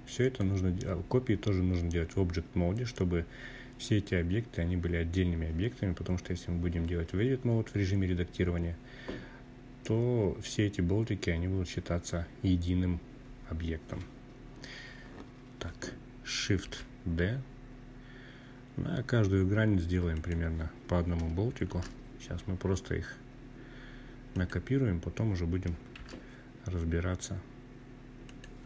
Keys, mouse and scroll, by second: 15.3 shift+d, 18.8 click, 20.4 shift+d, 23.0 click, 24.6 shift+d, 27.0 click, 28.0 shift+d.